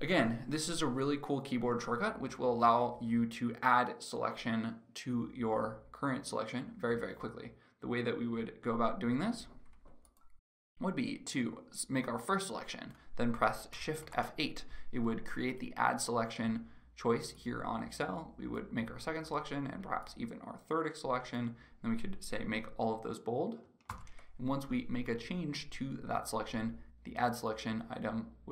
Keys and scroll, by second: 13.7 shift+F8, 23.6 ctrl+b.